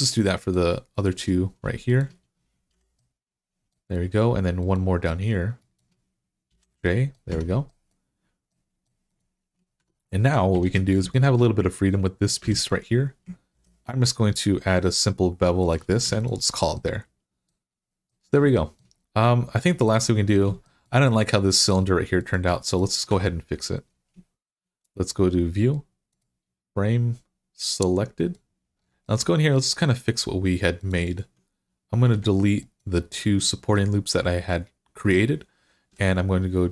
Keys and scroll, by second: 2.5 j, 6.3 j, 7.1 Tab, 9.6 Tab, 10.5 alt+z, 12.2 2, 13.4 ctrl+b, 15.9 Tab, 20.4 Tab, 22.9 Tab, 35.7 x.